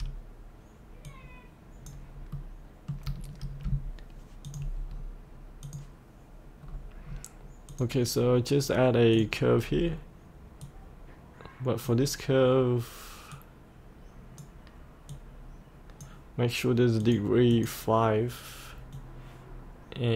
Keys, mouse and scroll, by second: 1.1 click, 2.2 scroll up 1, 2.4 middle click, 4.5 click, 5.0-5.6 scroll down 1, 5.6 click, 6.7-7.7 scroll down 1, 7.7 click, 9.7-10.7 scroll down 1, 10.7-16.4 drag, 18.5-20.1 drag.